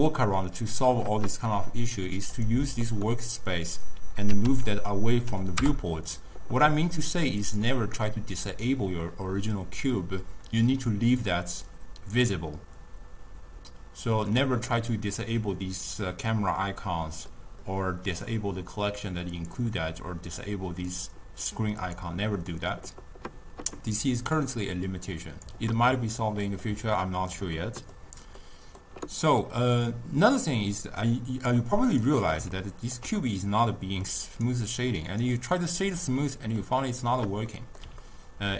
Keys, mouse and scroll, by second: 0.2-2.5 drag, 3.7 click, 4.7 0, 7.5 click, 14.5-19.4 middle drag, 19.4-22.0 drag, 24.4-26.3 drag, 26.3-27.7 middle drag, 27.7 scroll up 1, 27.7 middle click, 28.4 scroll up 1, 28.5-30.0 middle drag, 30.0-32.1 drag, 32.7-34.4 ctrl+middle drag, 34.4-36.3 right drag, 36.3-38.0 middle drag, 38.0 ctrl+scroll up 1, 38.1-38.5 ctrl+middle drag.